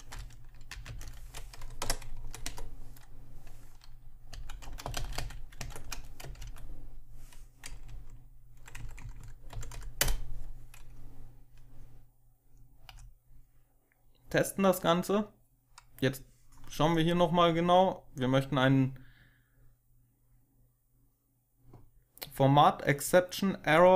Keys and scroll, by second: 0.6 ctrl+alt+7, 0.8 ctrl+alt+0, 1.2 Left, 1.7 0, 2.0 Right, 2.4 Right, 4.2-6.8 typing, 5.5 Tab, 7.8 Down, 8.3 Down, 8.5 Down, 8.6 Down, 9.4 Up, 9.6 Up, 9.9 Return, 12.8 F5.